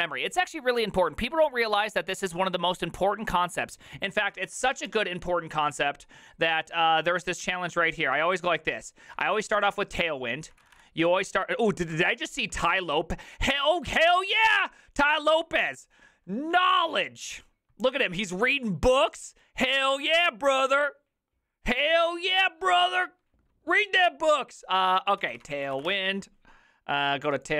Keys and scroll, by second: 4.9 alt+f, 4.9 alt+h, 10.5 typing, 12.2 typing, 25.5-26.3 typing.